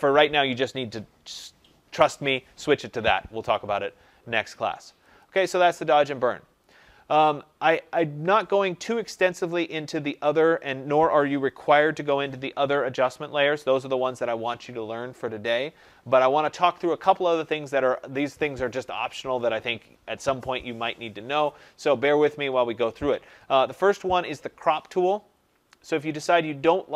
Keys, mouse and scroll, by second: 5.1 click, 11.0 click.